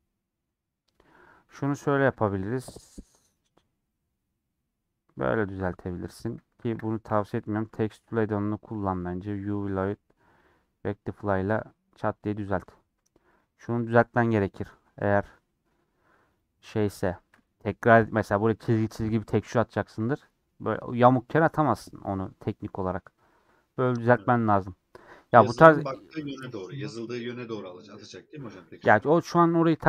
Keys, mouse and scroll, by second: 1.3 click, 9.4-12.6 drag, 12.6 middle click, 13.4 click, 16.4-20.0 drag, 20.0 g, 22.1 scroll down 2, 22.3-24.8 middle drag, 24.8 scroll down 2.